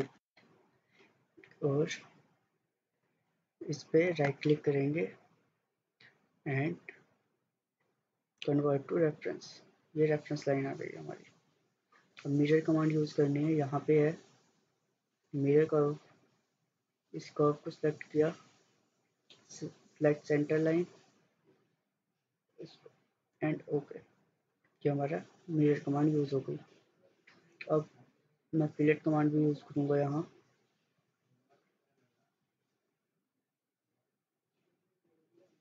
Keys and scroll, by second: 0.0-0.6 typing, 2.5 Escape.